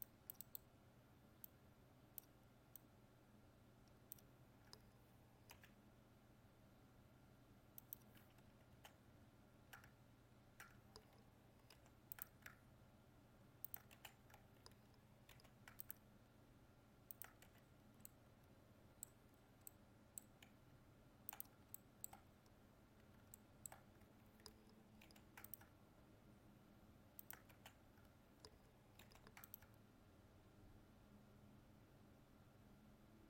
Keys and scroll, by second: 11.7 ctrl+r, 15.3 ctrl+r, 25.0 ctrl+r, 29.1 ctrl+r.